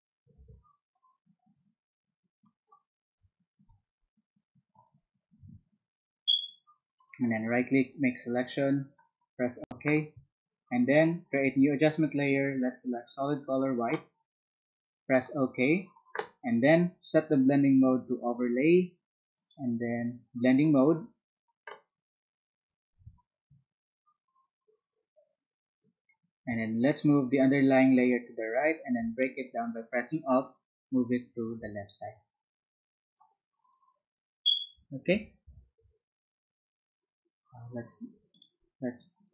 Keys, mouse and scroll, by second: 1.1-2.6 drag, 3.6 click, 4.7 click, 6.9 right click, 7.8 click, 11.3 click, 13.2 click, 15.1 click, 19.3-20.3 right drag, 26.8-29.3 drag, 32.2 alt+click, 33.6 alt+click, 38.3 ctrl+right click, 39.2 ctrl+click.